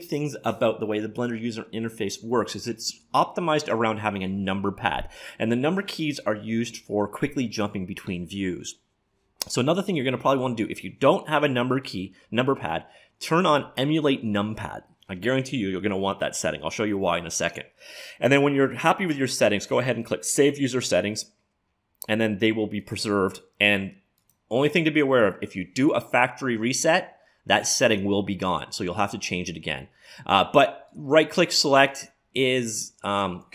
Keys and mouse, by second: 24.2-26.1 drag, 29.6-32.7 right drag, 31.9-33.5 drag.